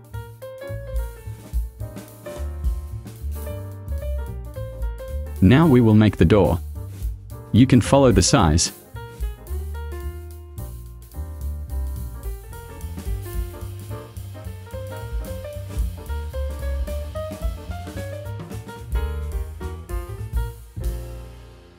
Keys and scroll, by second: 2.0 v, 8.8 d.